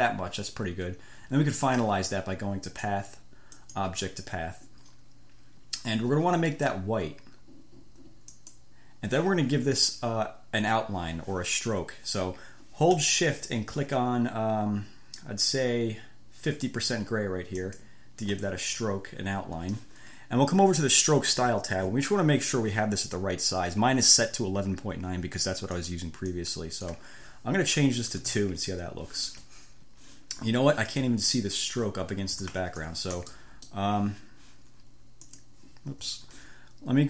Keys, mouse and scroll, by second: 3.0 click, 3.7 click, 8.7 click, 17.9 shift+click, 21.4 click, 26.0 click, 26.5 click, 28.3 2, 28.5 Return, 31.5-31.9 ctrl+scroll up 2, 32.8 ctrl+scroll down 2, 33.4 ctrl+1, 33.6 ctrl+click, 34.0 ctrl+scroll up 1, 35.5-35.9 scroll up 1, 36.2 F1.